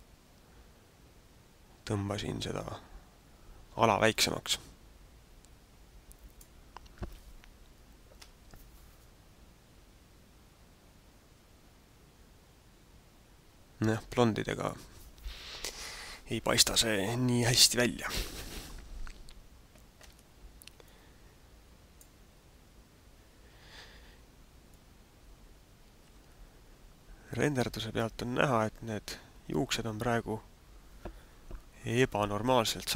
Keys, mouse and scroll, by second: 4.0 click, 20.1 Escape, 21.0 middle click.